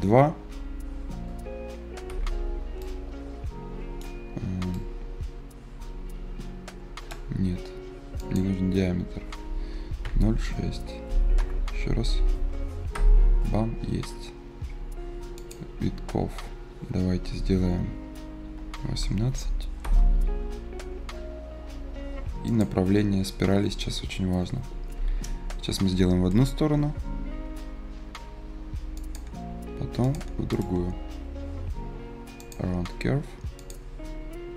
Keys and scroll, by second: 2.0 Return, 10.2 ï, 11.3 BackSpace, 11.4 s, 12.0 f, 12.8 Return, 18.4-19.4 typing, 19.7 Return.